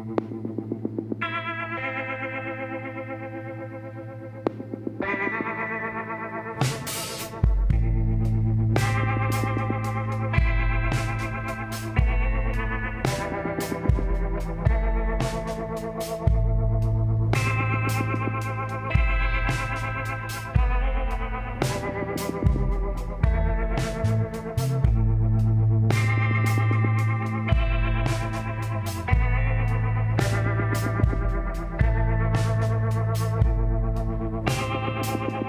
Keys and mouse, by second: 0.8 e, 3.3 e, 5.9-7.3 drag, 6.5 z, 10.1-11.7 drag, 10.6-13.1 middle drag, 13.8 right click, 14.6-15.8 drag, 14.6 shift+s, 16.8 shift+a, 21.5-22.6 drag, 23.8 middle click, 27.1-29.5 drag, 28.3 x, 29.5 middle click, 30.2-31.7 drag, 31.1 l, 31.7 middle click, 33.3 r.